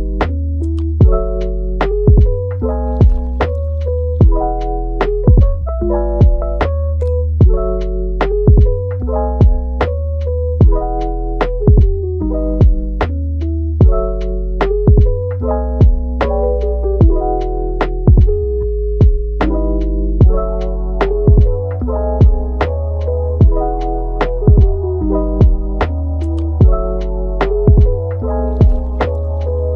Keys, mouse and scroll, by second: 0.6-1.4 middle drag, 1.4 g, 2.2 middle click, 2.6 g, 3.6 middle click, 4.3 click, 4.5 g, 5.8 click, 6.1 g, 6.8-9.3 middle drag, 9.3 Tab, 9.6 scroll down 2, 9.8-10.5 middle drag, 10.5-11.2 scroll up 2, 11.5 shift+d, 12.2 g, 14.1-14.5 middle drag, 14.5 g, 15.4-15.9 middle drag, 15.9 r, 17.7 Tab, 18.1-18.6 middle drag, 18.6 click, 19.0 g, 19.9 click, 20.4 g, 21.5-22.3 middle drag, 22.3 click, 22.7 g, 23.5 click, 23.9 g, 26.9 click, 27.2 g, 29.6-29.7 middle drag.